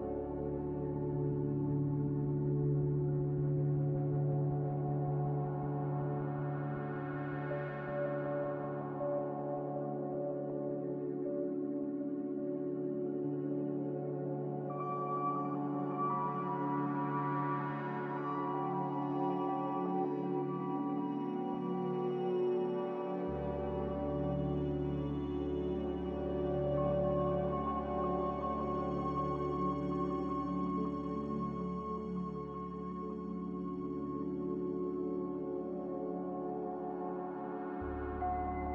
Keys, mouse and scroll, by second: 7.0 ctrl+z, 7.5 ctrl+z, 12.6 b, 27.1 z, 28.8 Delete, 37.9-38.7 typing.